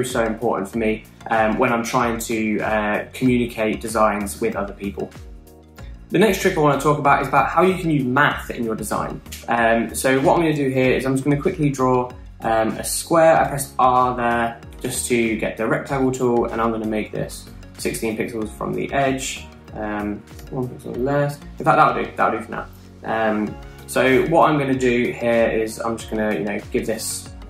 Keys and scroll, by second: 11.2 r, 14.6 alt+Right, 14.7 alt+Right, 14.8 alt+Right, 17.4 Down, 17.6 Down, 17.7 Down, 17.8 Down, 20.5 Right.